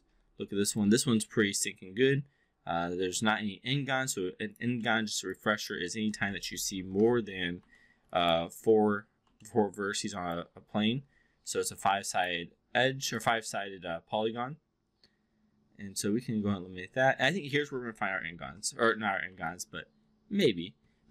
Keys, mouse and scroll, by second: 0.7-4.6 alt+drag, 4.8 alt+middle drag, 5.3-5.7 alt+drag, 5.9 alt+middle click, 6.7 shift+i, 7.8 alt+middle click, 8.1 alt+click, 9.4 alt+middle drag, 10.1 alt+click, 11.5 4, 11.9 click, 13.1-17.5 alt+drag, 18.2 shift+i, 19.5-20.5 alt+drag.